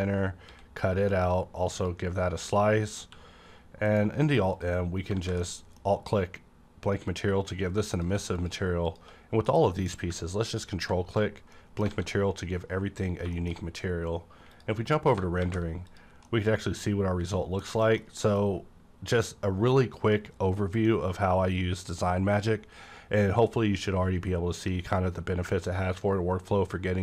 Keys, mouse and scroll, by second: 0.5 x, 1.2 x, 1.7 click, 3.0-3.9 typing, 4.9 scroll down 1, 5.1 alt+a, 5.4-7.9 middle drag, 5.9 scroll down 1, 7.9 click, 8.9 shift+click, 9.5 m, 10.3-11.9 drag, 11.5 middle click, 11.9 alt+a, 13.1 scroll down 1, 13.3 middle click, 14.5 click, 14.5 click, 15.4 v, 15.9 click, 16.5-17.7 middle drag, 18.0 shift+scroll down 1, 18.2 middle click, 20.9-27.0 middle drag.